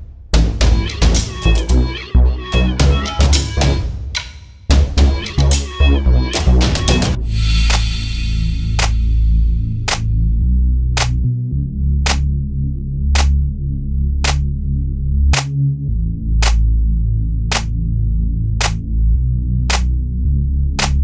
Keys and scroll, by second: 8.2 s, 19.6 m.